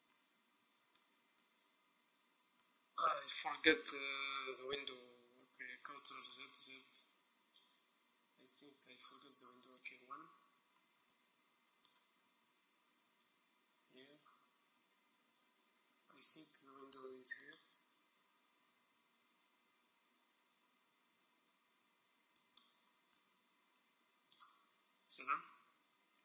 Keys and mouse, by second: 5.8 ctrl+z, 6.2 ctrl+z, 6.7 ctrl+z, 7.0 ctrl+z, 8.5 ctrl+z, 9.9 KP_1, 12.9 e, 17.7-19.3 drag, 18.1 e, 22.7-23.9 right drag, 23.2 click, 23.9 middle click, 25.1 KP_7.